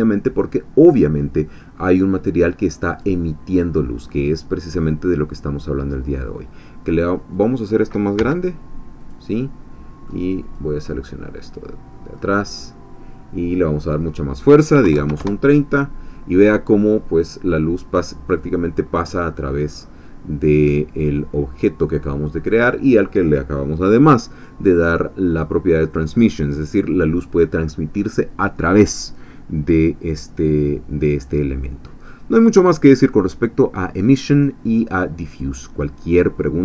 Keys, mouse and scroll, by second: 1.5 middle click, 2.9 click, 6.1-7.3 middle drag, 7.3 click, 8.2 s, 9.0 click, 9.4 middle click, 10.4 click, 10.9-12.3 middle drag, 12.5 scroll down 1, 13.7-14.8 drag, 14.8 3, 14.9 0, 15.2 Return, 18.9-19.5 scroll down 2, 20.1 scroll down 2, 20.6-22.8 middle drag, 22.6 click, 33.0-33.6 scroll down 4, 33.8 scroll down 2, 35.3-36.6 middle drag.